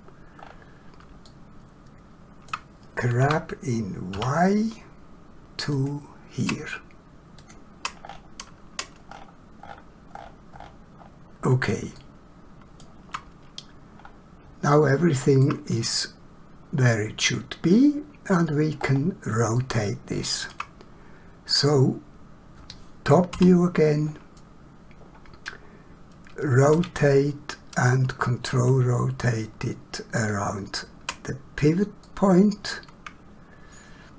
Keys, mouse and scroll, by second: 0.4 scroll up 1, 1.3 shift+middle click, 3.2 g, 4.1 y, 7.4 ctrl+click, 8.0 scroll down 1, 11.1-11.7 scroll up 1, 12.0 shift+middle click, 14.0 scroll up 1, 14.8 shift+middle click, 15.8 middle click, 18.9 scroll down 1, 19.5 shift+middle click, 26.7 r, 32.0 middle click.